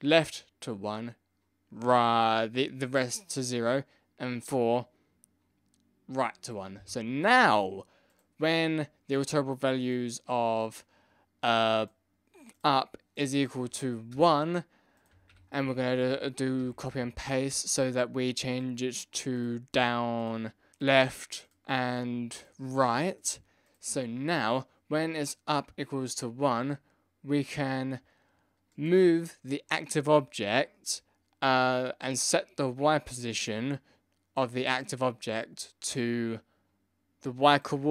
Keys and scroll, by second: 15.3 ctrl+c, 15.6 ctrl+v, 15.9 ctrl+v, 16.6 ctrl+v.